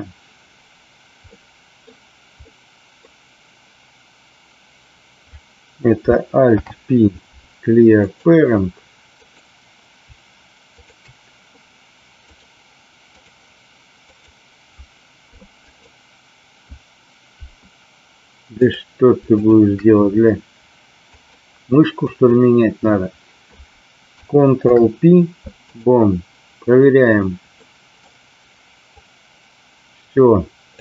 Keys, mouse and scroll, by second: 1.2-1.9 middle drag, 2.5 middle click, 6.5 alt+p, 9.1 click, 12.4-13.3 drag, 14.0 click, 15.7 click, 18.6 click, 19.4 shift+click, 21.2-22.4 drag, 24.6 ctrl+p, 27.5 middle click, 29.1-30.7 drag.